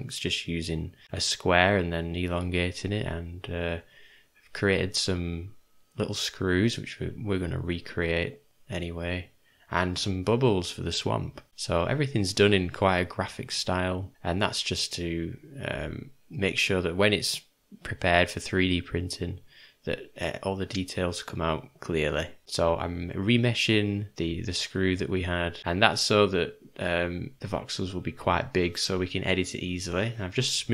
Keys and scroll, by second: 1.0 shift+d, 2.2 ;, 3.0 /, 3.8 /, 6.2 /, 7.2 Home, 10.4 /, 13.9 /, 14.2 /, 16.9 /, 17.8 Home, 21.4 /, 22.4 d, 22.4 v, 23.2 4, 24.4-24.9 ], 25.2 ], 26.4 ].